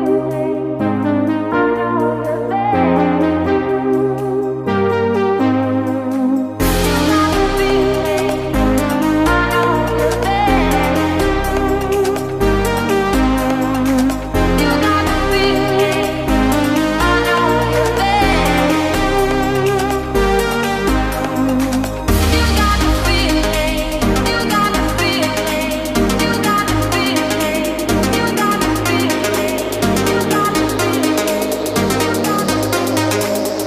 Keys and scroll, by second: 0.8 ctrl+space, 6.4 ctrl+space, 7.7 ctrl+space, 8.5 ctrl+a, 12.1 ctrl+space, 17.9 ctrl+space, 18.6 ctrl+2, 18.9 ctrl+space, 20.2 ctrl+space, 22.8 ctrl+x, 23.4 ctrl+v, 24.0 ctrl+v, 26.2 ctrl+space, 28.7 ctrl+x, 29.1 ctrl+v, 29.5 ctrl+space, 32.7 ctrl+space.